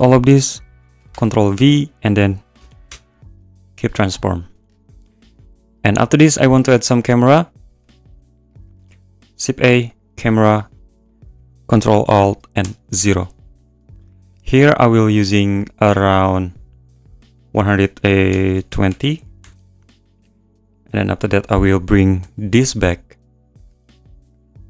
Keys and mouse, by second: 1.1 ctrl+p, 7.8 `, 8.6 click, 8.8 shift+a, 11.1 click, 12.6 ctrl+alt+KP_0, 15.8-16.9 drag, 17.1-18.4 drag, 17.3 1, 18.4 BackSpace, 18.5 click, 21.2 click, 22.2 n, 23.6 click, 24.3 click.